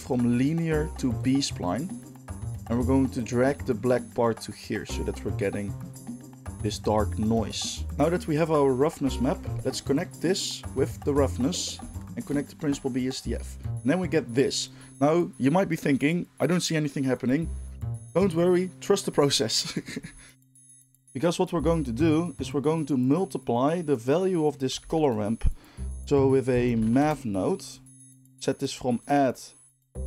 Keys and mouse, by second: 0.1-12.1 drag, 12.1-29.1 ctrl+shift+middle drag, 24.8 shift+a, 29.1-30.0 drag.